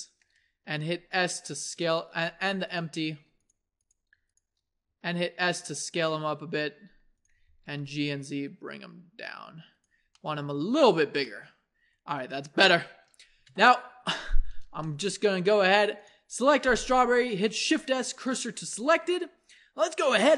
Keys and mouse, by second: 0.9 s, 2.7-7.2 drag, 4.9 s, 7.4 g, 10.2-13.4 drag, 13.4 KP_1, 17.6 shift+s, 19.0 a.